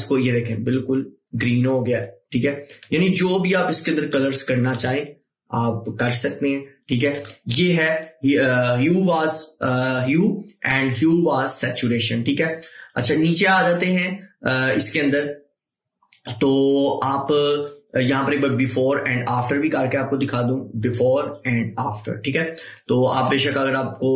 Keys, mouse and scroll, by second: 13.0-17.8 drag, 19.0 click, 19.1-24.1 drag.